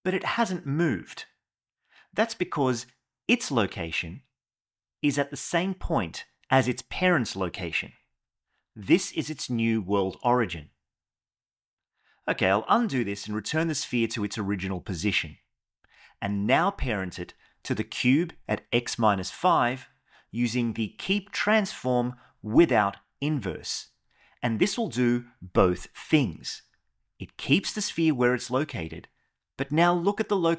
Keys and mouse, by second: 2.1 click, 2.5 g, 12.0 ctrl+z, 12.4 ctrl+z, 12.8 ctrl+z, 13.2 ctrl+z, 13.5 ctrl+z, 13.9 ctrl+z, 14.3 ctrl+z, 14.8 ctrl+z, 15.2 ctrl+z, 16.2 shift+click, 17.4 ctrl+p, 28.2 click.